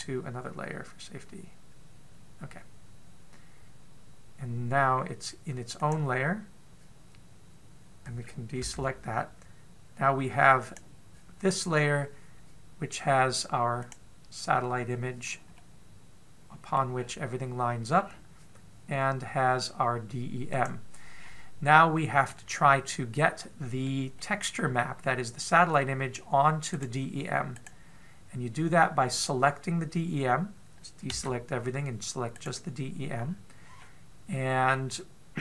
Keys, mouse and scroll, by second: 7.1 click, 9.5 a, 11.5 click, 14.7 click, 16.4 middle click, 17.8-18.1 scroll up 5, 18.8-19.2 scroll down 4, 21.4 click, 22.0-23.1 scroll down 4, 23.1 middle click, 23.1 scroll down 2, 25.0 middle click, 27.6 right click, 28.4 right click, 32.0 a, 33.2 right click, 34.0-34.6 scroll up 2, 34.6 middle click.